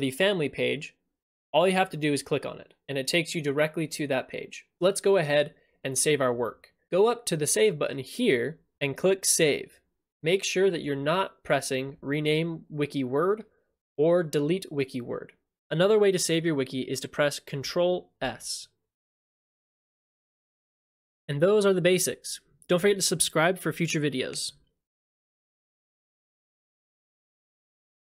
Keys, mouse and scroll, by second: 17.6 click, 18.2 ctrl+s.